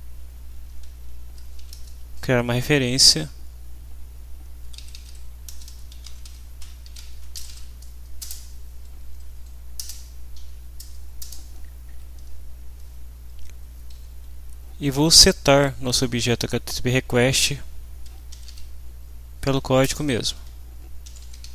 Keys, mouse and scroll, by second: 0.5-1.7 typing, 4.4-8.0 typing, 8.2 Return, 9.1 Down, 9.8 Return, 10.3 End, 11.2 Return, 13.6 Up, 13.9 Down, 15.8 Up, 16.0 Down, 18.1-19.0 typing, 19.5 Down, 19.8 Return, 20.3-21.5 typing.